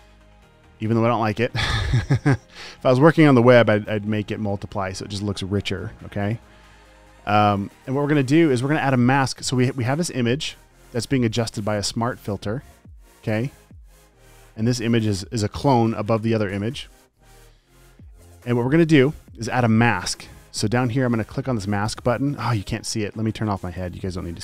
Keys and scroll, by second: 4.3 alt+shift+m, 6.5 super+z.